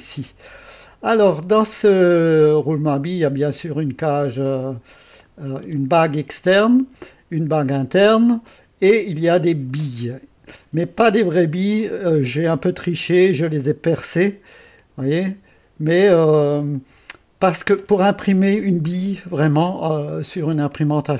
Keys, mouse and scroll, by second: 1.0-3.6 drag, 5.1 click, 5.7 space, 6.4-7.9 drag, 8.4-12.2 drag, 12.6-14.1 drag, 14.6 click, 15.0 space, 16.2 space, 16.7-19.4 drag.